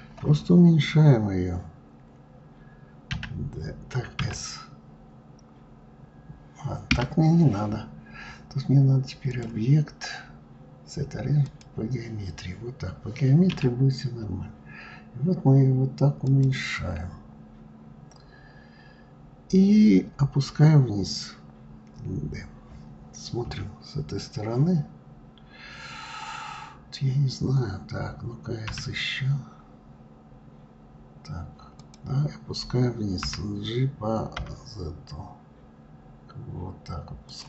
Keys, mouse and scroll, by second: 8.9-12.0 drag, 16.8 scroll up 2, 23.1 KP_3.